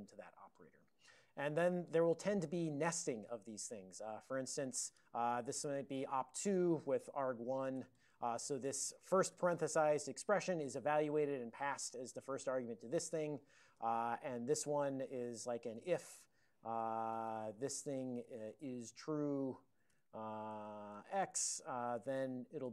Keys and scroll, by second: 4.4 alt+b, 4.5 alt+b, 4.7 alt+b, 5.0-9.9 typing, 6.9 alt+f, 10.1 ctrl+alt+b, 11.8 alt+b, 12.3 alt+f, 13.0 ctrl+f, 13.6 alt+f, 13.8 alt+b, 14.4 (, 16.1-22.7 typing.